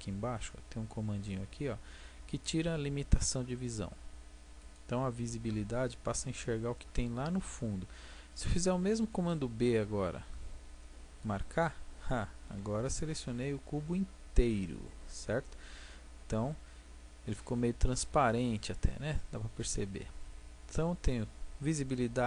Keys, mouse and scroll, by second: 4.6-6.5 drag, 9.0 b, 11.7-13.1 drag, 13.1 middle click, 13.3 click, 13.4-22.1 middle drag, 22.1-22.2 drag.